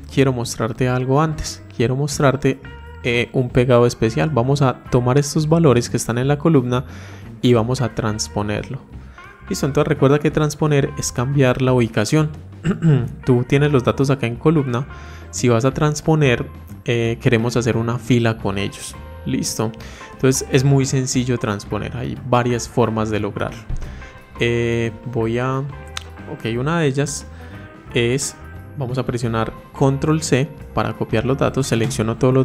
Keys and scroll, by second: 30.9 ctrl+c.